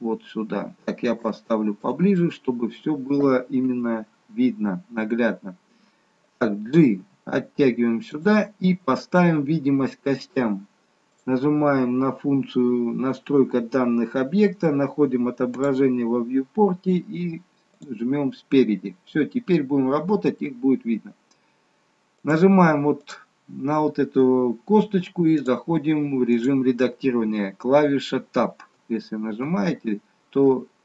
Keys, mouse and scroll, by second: 1.4 shift+middle click, 2.2 middle click, 3.7 KP_3, 11.3 click, 15.8 click, 16.2-17.9 scroll down 3, 17.9 click, 22.2 click, 23.0 click, 28.9 Tab, 29.5 Tab.